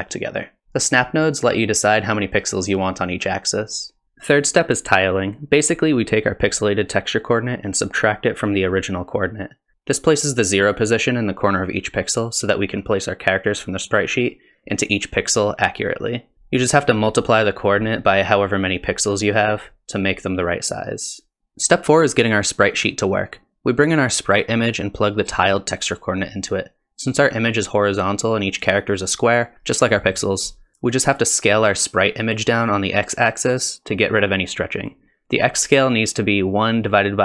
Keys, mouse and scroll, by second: 1.1 middle click, 2.2 middle click, 2.2 click, 2.2 scroll up 5, 4.0 click, 4.0-4.6 scroll down 3, 5.4 middle click, 5.9 middle click, 6.3 scroll down 1, 7.1 click, 9.7 middle click, 9.7 ctrl+shift+click, 14.3 shift+click, 14.3 scroll up 3, 21.4 middle click, 21.4 click, 21.4 scroll down 6, 22.9 middle click, 24.3 click, 25.6 click, 31.6-32.1 scroll up 3, 32.3 shift+click, 35.3 click, 35.4-36.3 scroll up 3, 36.3 click.